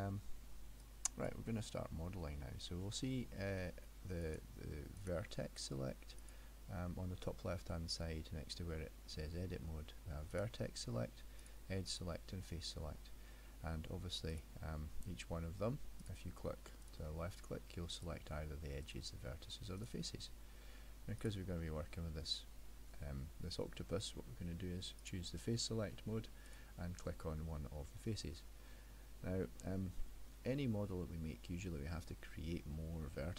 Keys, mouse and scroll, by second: 0.9 click, 2.2 middle click, 4.3 click, 5.0 click, 6.3 click, 10.4 click, 11.5 click, 12.0 click, 14.4 click, 16.1 click, 16.9 click, 18.0 click, 18.9 click, 19.9 click, 21.2 click, 22.3 middle click, 25.1 click, 26.5 click, 27.9 middle click, 30.0 middle click.